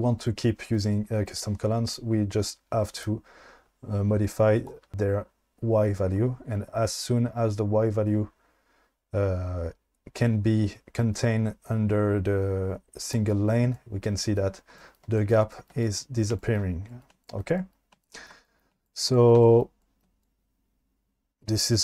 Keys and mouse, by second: 3.2-13.1 drag, 5.3 ctrl+z.